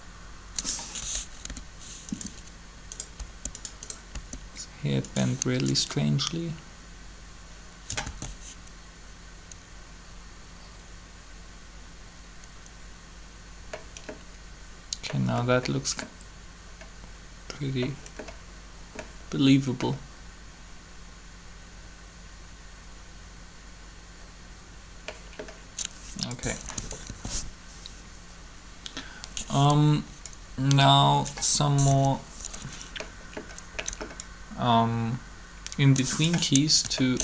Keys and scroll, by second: 1.5 r, 3.1 r, 8.0 alt+a, 26.5-27.1 typing, 31.9 3.